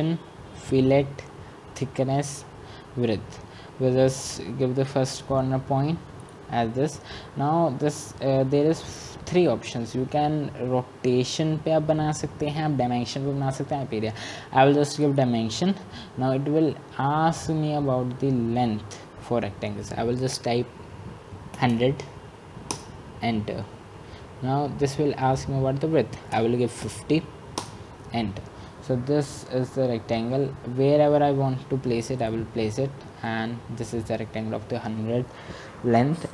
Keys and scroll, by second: 22.8-23.5 typing, 26.6 Return, 27.7-28.4 typing.